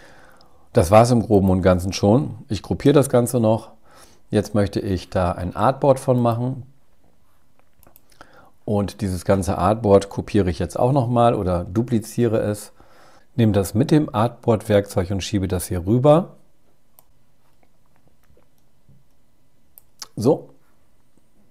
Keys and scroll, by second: 1.9 super+g, 10.7 super+j.